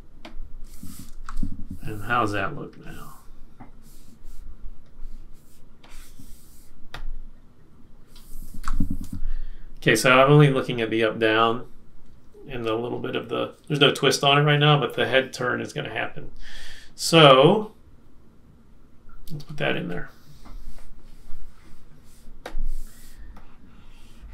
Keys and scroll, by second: 0.6 F6, 1.2 shift+Up, 8.6 super+-.